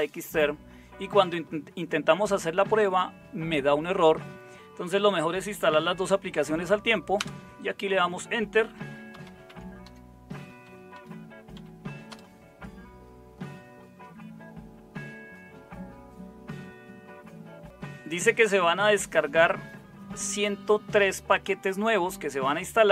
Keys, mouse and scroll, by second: 7.1 Return, 8.5-11.5 typing, 12.0 Return.